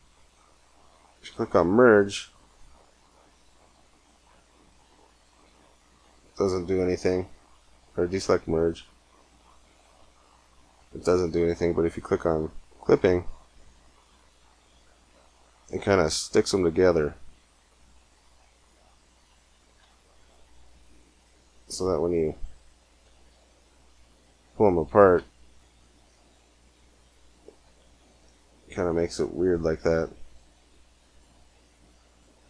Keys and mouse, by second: 1.0 g, 2.6 g, 5.3 g, 8.6 g, 9.8 g, 12.6 click, 13.5 g, 19.6 Tab, 21.1 g, 22.9 Tab, 23.3 g, 25.0 Tab, 27.4 Tab, 27.6 g, 31.4 middle click, 31.6 middle click, 32.0 middle click.